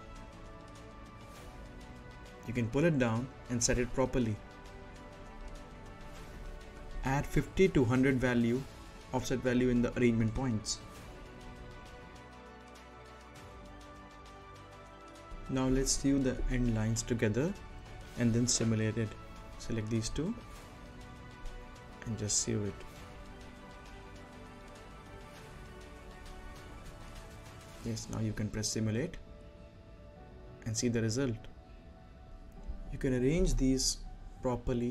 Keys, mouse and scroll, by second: 0.0 shift+f, 0.7 right click, 1.1-1.7 scroll up 1, 1.7 click, 5.4-6.1 scroll down 1, 8.6-10.4 drag, 10.4 right click, 11.7-14.3 drag, 14.3 scroll up 1, 14.5 right click, 15.5 scroll up 1, 15.8 middle click, 16.6 click, 20.7 n, 21.2 click, 24.5-25.1 scroll down 1, 25.1 middle click, 26.7 click, 27.5-28.0 scroll up 1, 28.0 right click, 28.8 space, 32.4-33.5 right drag, 33.6 right click, 34.3-34.9 scroll down 2, 34.6 middle click.